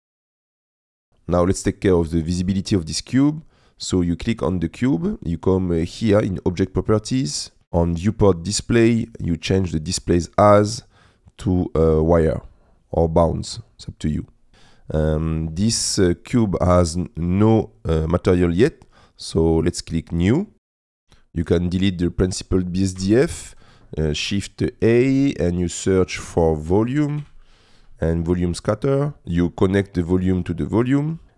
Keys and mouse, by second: 0.0 n, 0.1 click, 0.2 middle click, 0.5 middle click, 0.5 g, 0.5 shift+z, 0.7 click, 0.8 g, 0.8 middle click, 1.0 click, 2.3 click, 10.4-13.1 drag, 14.5 n, 21.0 click, 22.3 click, 23.0 Delete, 23.7 click, 24.2 shift+a, 29.2 click, 30.2 click.